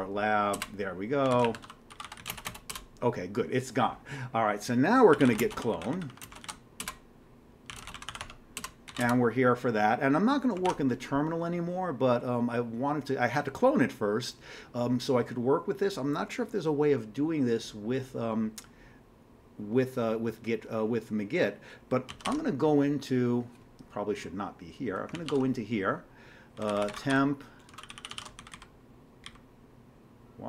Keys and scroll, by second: 0.0-3.2 typing, 0.5 Return, 4.9-9.5 typing, 6.8 Return, 10.7 ctrl+d, 10.7 typing, 22.1 ctrl+x, 22.3 ctrl+f, 25.1 ctrl+x, 25.3 ctrl+f, 26.3-29.5 typing, 27.8 ctrl+g, 28.0 ctrl+g, 28.1 ctrl+x.